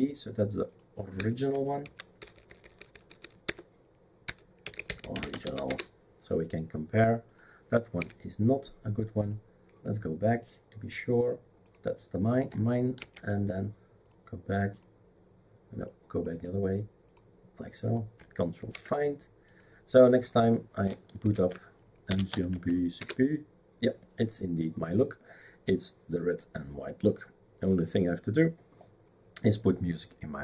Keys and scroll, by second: 1.1 F2, 1.8 Right, 2.2-5.9 typing, 8.0 Delete, 13.0 ctrl+c, 18.7 ctrl+v, 21.2 ctrl+alt+t, 21.8-22.8 typing, 23.0 Return.